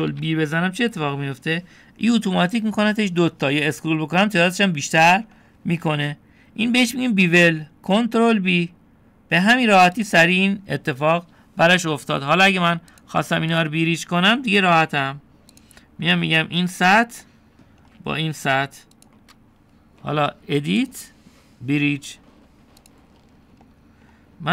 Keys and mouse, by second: 1.1 ctrl+b, 14.0 click, 16.6 click, 17.8 click, 18.3 middle click, 22.0-23.9 drag, 23.7-24.5 typing.